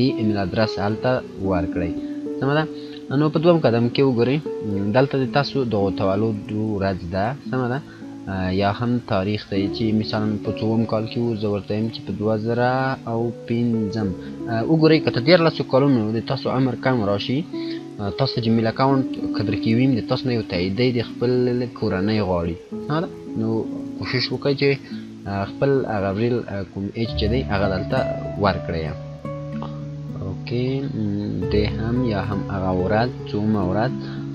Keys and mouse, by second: 2.4 click, 5.4 click, 11.3 click, 11.4-12.3 typing, 29.1 F9, 30.4 click, 32.6 1, 33.8 click.